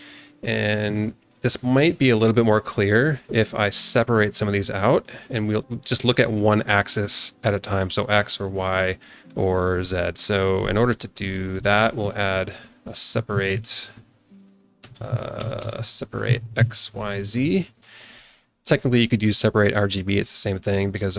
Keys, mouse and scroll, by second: 0.7 scroll down 1, 1.0 alt+shift+middle click, 1.8 click, 3.2 click, 4.5 click, 11.8 ctrl+shift+a, 14.9 BackSpace, 16.3 Down, 17.8 scroll up 2, 18.7 click.